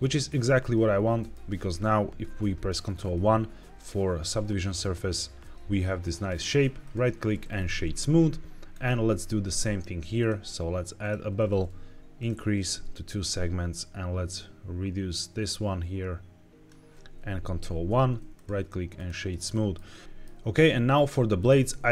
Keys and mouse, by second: 0.3 middle drag, 1.1 middle drag, 3.0 ctrl+1, 5.4-6.3 middle drag, 6.8-7.5 right drag, 8.7 click, 10.1-11.0 drag, 12.1 click, 12.8-16.7 shift+drag, 17.4 ctrl+1, 18.3 click, 19.4 middle drag, 20.0 middle click, 21.3 click.